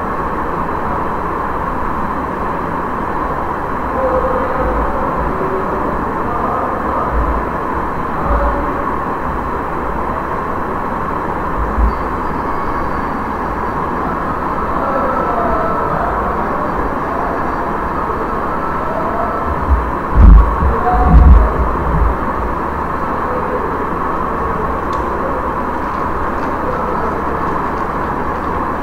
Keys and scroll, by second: 4.0 ctrl+a, 4.5 ctrl+v, 7.0 ctrl+v, 8.3 Return.